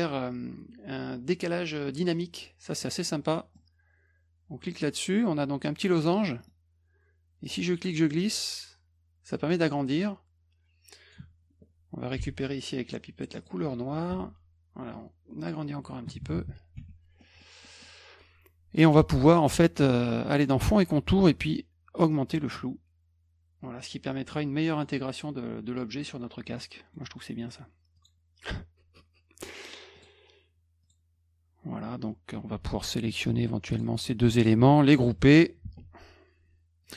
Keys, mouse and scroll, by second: 2.8 click, 3.3 middle click, 4.6 click, 6.0 middle click, 6.2 middle click, 6.4 middle click, 7.7-11.1 drag, 12.2 d, 13.4 click, 14.1 F2, 14.9 click, 16.8 F1, 17.2 middle drag, 17.6 middle click, 20.3 click, 22.1 click, 26.6-26.9 middle drag, 27.9 click, 29.9 click, 30.8 click, 33.7 click, 34.3 shift+click, 35.6 ctrl+g, 36.8 click.